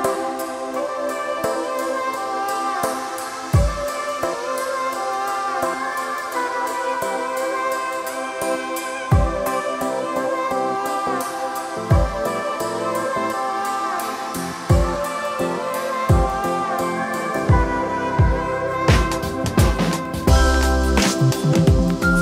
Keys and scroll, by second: 15.3 KP_7, 16.4 KP_1.